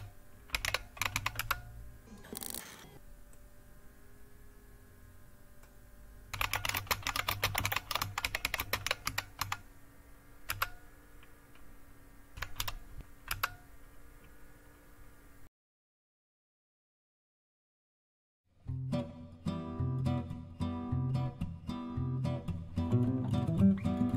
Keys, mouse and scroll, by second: 0.0-2.7 typing, 6.1-10.4 typing, 19.3-21.2 scroll down 3, 21.2-24.1 scroll down 2.